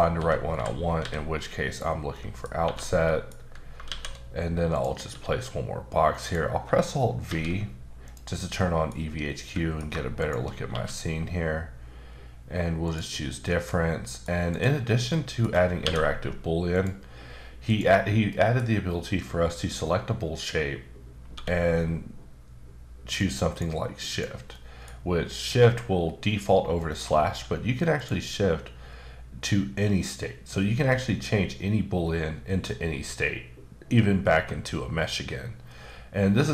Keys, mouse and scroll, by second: 1.7 click, 2.1 middle click, 2.6 1, 3.0 middle click, 3.8 shift+a, 4.7 click, 5.1 s, 6.2 click, 7.2 alt+v, 8.0 click, 8.5 middle click, 9.0-9.4 scroll up 1, 9.4 middle click, 10.2 shift+click, 10.7 q, 12.9 click, 13.3 middle click, 14.0 middle click, 14.5 click, 15.0 middle click, 15.8 q, 16.7 click, 17.3-17.7 scroll down 1, 17.7 click, 18.3 middle click, 21.3 q, 23.2 click, 24.1 click, 24.5 middle click, 26.8 middle click, 27.3 q, 27.9 click, 28.6-30.5 scroll down 5, 30.7-31.3 scroll down 3, 31.3-32.0 scroll up 1, 32.0-33.6 scroll up 4, 34.3-35.4 scroll up 3, 35.4-36.1 scroll down 1.